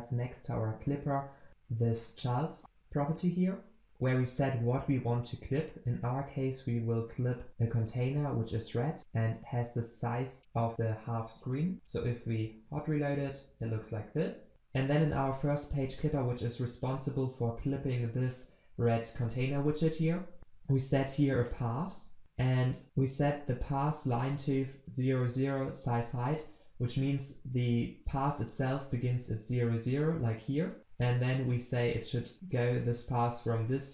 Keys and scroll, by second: 1.5 ctrl+space, 2.6 Return, 6.1 ctrl+v, 12.0 ctrl+s.